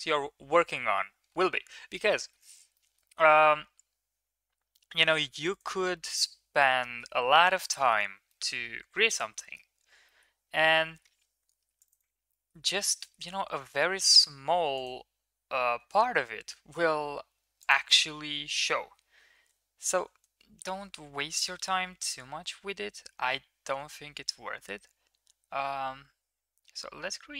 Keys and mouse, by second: 5.9 middle click, 6.8 shift+middle click, 7.5 shift+middle click, 7.7 middle click, 8.2 middle click, 9.3 middle click, 10.0 middle click, 10.6 Tab, 11.6 ctrl+r, 12.2 middle click, 12.9 middle click, 13.3 ctrl+z, 14.1 ctrl+r, 20.0 ctrl+b.